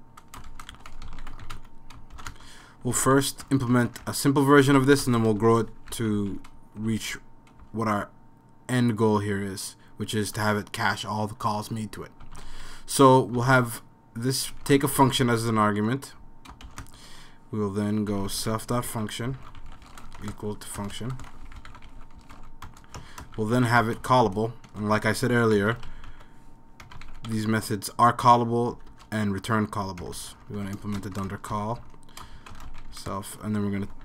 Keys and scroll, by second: 0.0-8.2 typing, 10.0-10.8 typing, 12.0-34.0 typing, 16.0 Tab.